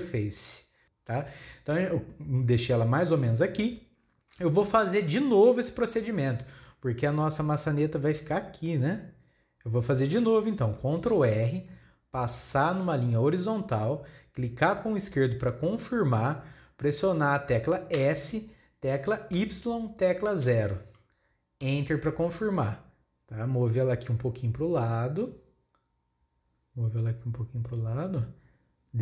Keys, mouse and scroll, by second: 0.8-2.0 shift+scroll up 1, 2.0-4.3 scroll down 1, 4.3 alt+a, 4.9 shift+middle click, 5.4 scroll up 2, 5.9-9.0 shift+middle drag, 11.1 ctrl+r, 24.1-27.0 drag.